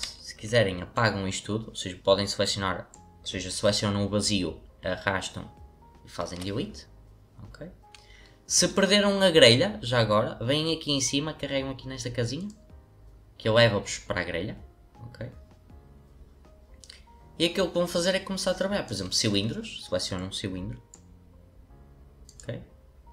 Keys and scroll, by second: 6.3 Delete.